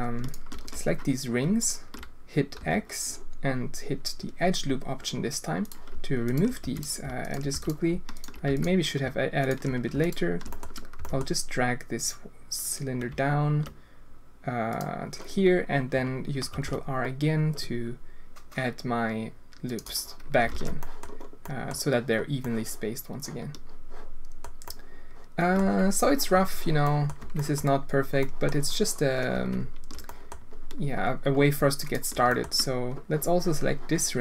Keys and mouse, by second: 1.6 alt+click, 2.6 x, 6.2 alt+click, 6.6 x, 7.5 x, 8.1 click, 8.4 x, 9.4 alt+click, 10.0 alt+click, 10.5 shift+middle drag, 10.9 g, 16.5 ctrl+r, 20.5 alt+a, 20.8 click, 21.5 click, 22.4-24.3 drag, 24.6 click, 25.6 Tab, 26.3 Tab, 26.8 click, 27.2 Tab, 27.3 drag, 28.2 drag, 29.3 Tab, 30.0 drag, 31.8 alt+click, 32.3 shift+click.